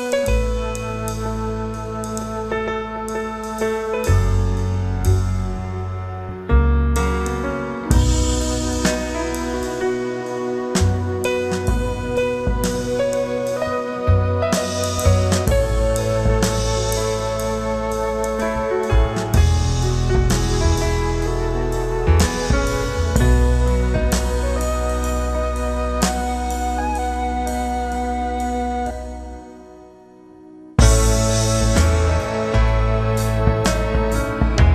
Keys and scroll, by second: 0.3 w, 3.1 Return, 3.6 shift+F2, 4.0 ctrl+d, 4.2 ctrl+space, 4.6 ctrl+g, 6.3 ctrl+space, 6.6 Return, 11.2 space, 18.9 space, 24.0 space, 26.7 space, 30.0 space, 31.2 ctrl+KP_Subtract, 32.6 w, 34.4 ctrl+alt+d.